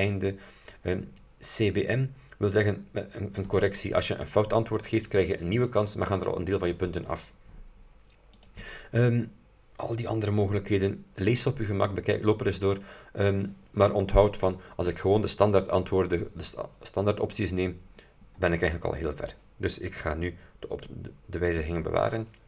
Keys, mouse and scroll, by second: 8.5 click, 18.0-18.9 scroll down 4, 21.4 click.